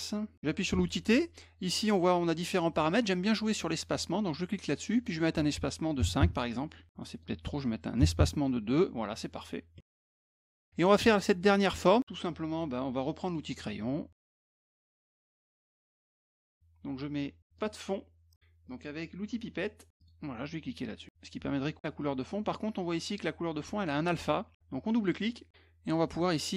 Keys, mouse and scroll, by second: 3.5 click, 5.0 click, 7.1 click, 10.3 middle click, 13.3 click, 14.1 click, 15.1 click, 17.6 click, 20.0 click.